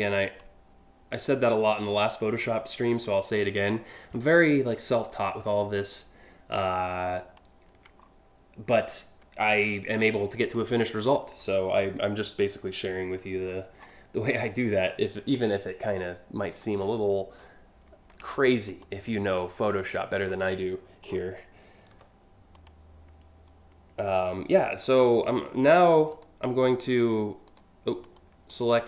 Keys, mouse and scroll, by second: 0.9 ctrl+click, 2.5 ctrl+click, 3.9-5.4 ctrl+drag, 6.4 ctrl+click, 7.7-8.2 scroll down 5, 8.3 scroll up 1, 9.8-10.2 scroll up 4, 10.8-11.2 scroll up 3, 13.0-14.0 scroll down 5, 16.1 scroll down 1, 16.4 scroll up 3, 17.0 scroll up 1, 18.3 ctrl+click, 19.1 scroll down 2, 19.9 scroll down 1, 20.7 scroll down 1, 21.6 a, 22.2 click, 25.7 shift+right click, 26.6 click, 27.1 right click, 27.7 click, 28.1 click.